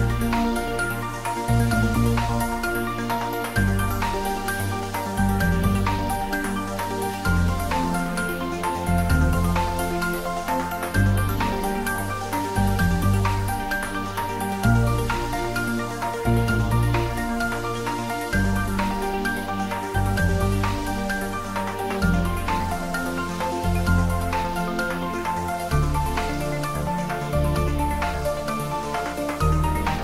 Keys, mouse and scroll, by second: 0.1 shift+z, 0.9 g, 1.8 Down, 3.5 click, 4.0 middle click, 4.4 shift+z, 5.7 x, 7.4 click, 7.5-8.5 typing, 9.6 click, 10.4 shift+d, 10.7 y, 11.5 click, 11.7 ctrl+s, 12.0 ctrl+middle click, 12.9-14.6 typing, 14.3 click, 14.8 ctrl+z, 15.8-19.4 typing, 17.8 click, 18.0 ctrl+z, 20.1 click, 20.2 ctrl+z, 20.5-25.0 typing, 22.0 click, 24.9 click, 25.5 click, 26.2-27.2 typing, 28.2 click, 29.8 shift+middle click.